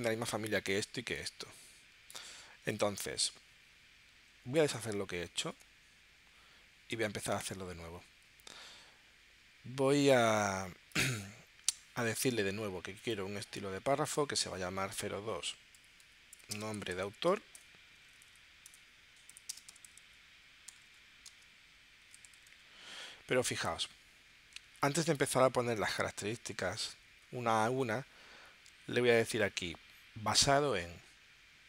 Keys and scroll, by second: 15.6-17.8 typing, 19.5-23.0 typing.